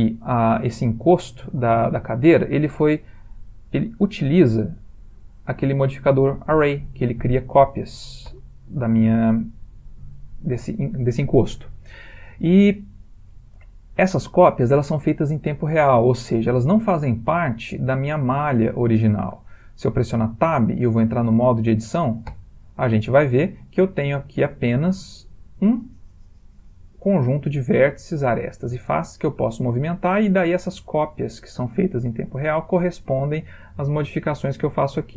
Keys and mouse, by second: 3.7 click, 5.5 click, 22.4 Tab, 24.3 click, 24.9 g, 28.2 click, 28.4 g, 34.4 click, 34.7 g.